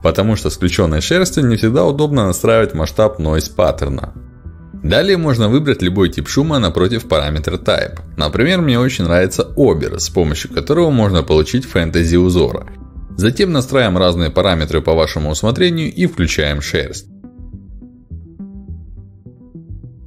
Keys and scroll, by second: 8.2 ctrl+alt+d.